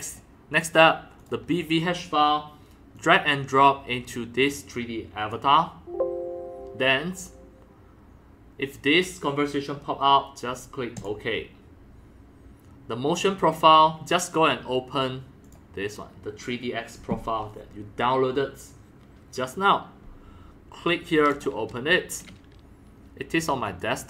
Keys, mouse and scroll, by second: 0.0 middle click, 0.2-1.7 drag, 3.0-5.3 drag, 7.4-10.4 drag, 10.9 click, 11.1-14.2 drag, 15.4 click, 16.1-20.7 drag, 20.6 right click, 21.3 click, 21.4-23.4 drag, 23.6 click.